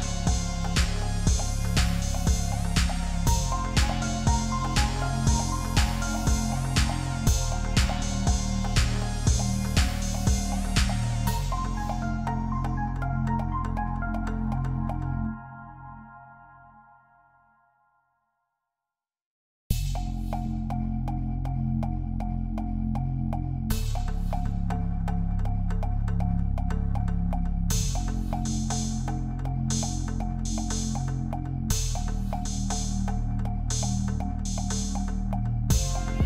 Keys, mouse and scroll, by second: 1.1 ctrl+t, 3.6-4.0 Up, 5.1 alt+scroll up 1, 6.0 double click, 7.8 Down, 8.4 Down, 8.8 Return, 10.2 Up, 10.4 Up, 10.4 Up, 10.6 Up, 10.8 Up, 11.4 typing, 12.9-13.6 typing, 19.8 Return, 22.0-22.5 typing, 25.7 Return, 26.7 alt+scroll up 1, 30.2 ctrl+t, 33.9 alt+scroll down 1, 35.8-36.2 typing, 36.1 alt+scroll up 6.